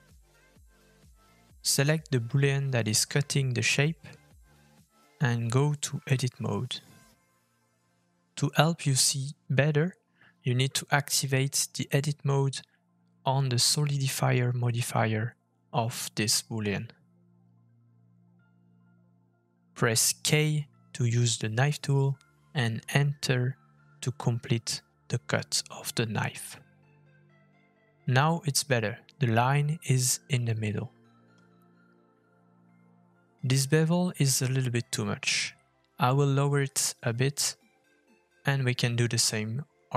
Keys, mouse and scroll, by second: 1.8 Tab, 4.4 middle click, 5.8 shift+middle click, 9.9 click, 17.2 click, 19.1 middle click, 21.4 k, 22.7 middle click, 27.9 middle click, 29.7 middle click, 30.1 middle click, 30.4 shift+middle click, 30.6-30.9 scroll up 2, 30.9-31.4 scroll down 1, 31.4-32.1 scroll down 1, 32.7 middle click, 32.7 f, 34.1-34.6 scroll up 3, 34.6 shift+middle click, 35.8 shift+middle click, 37.3 f, 38.4 click, 38.8 f.